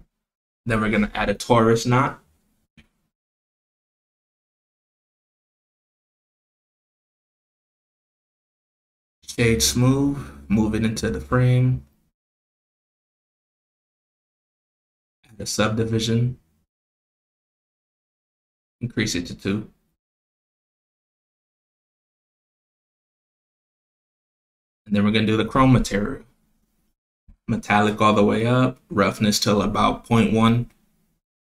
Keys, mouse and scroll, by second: 0.0 click, 2.0 shift+a, 7.5 middle drag, 7.9-8.4 scroll down 3, 8.7 middle drag, 8.7 scroll down 2, 9.3 g, 11.6-12.9 right drag, 14.1 click, 15.1-16.2 drag, 16.9 click, 17.4 KP_0, 18.2 click, 23.3 click, 24.0 drag, 24.8 click, 27.7-28.3 drag, 28.8 click.